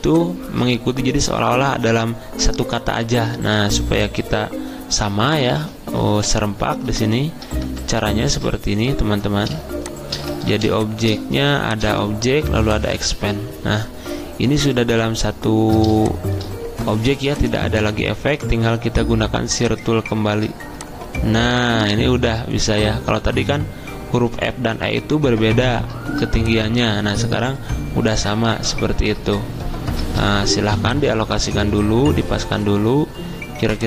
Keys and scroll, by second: 8.6 ctrl+z, 30.6 v.